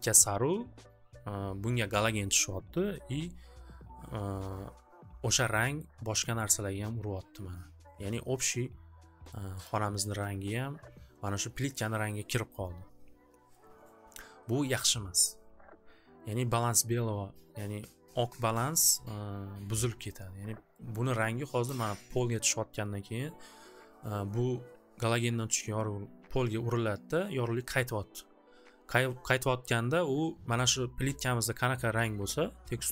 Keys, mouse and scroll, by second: 5.9-6.5 scroll, 9.3 click, 9.7 click, 20.9 scroll, 23.1-25.5 scroll up 1, 25.5 scroll.